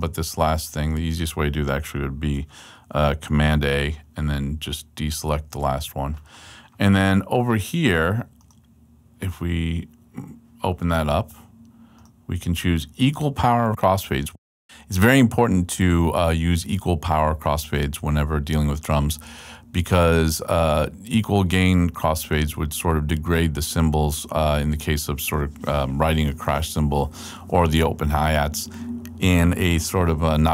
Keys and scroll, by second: 3.5 super+a, 4.3 shift+super+a.